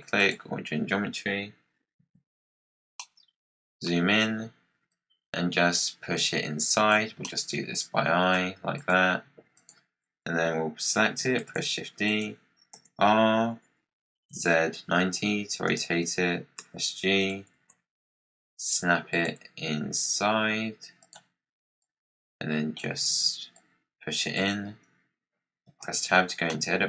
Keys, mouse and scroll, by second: 1.9 KP_Decimal, 2.9-4.8 middle drag, 4.8 click, 7.1-8.3 middle drag, 8.3-8.7 scroll down 5, 8.7 click, 9.4 click, 11.3 shift+d, 12.7 r, 16.5 g, 17.4 g, 19.3 g, 21.7 click, 23.0 z, 23.4 click, 25.6 Tab, 26.2 scroll down 4, 26.4 middle click.